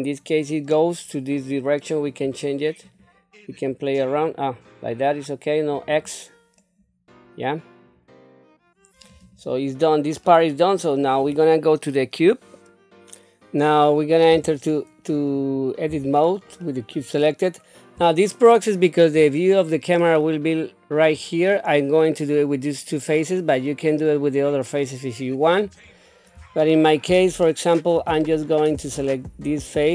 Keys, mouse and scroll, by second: 2.1 click, 2.8 click, 3.5 click, 5.7 click, 6.6-9.0 middle drag, 9.2 click, 9.7 middle click, 11.0 click, 15.1 click, 15.9 Tab, 16.6 middle click, 18.0 middle click, 19.1-19.6 scroll down 2, 20.0 middle click, 21.1-21.6 scroll up 1, 23.2 middle click, 24.8 middle click, 25.8-26.3 scroll up 2, 26.6 shift+middle click, 27.4 middle click, 28.2 shift+middle click, 28.9 click.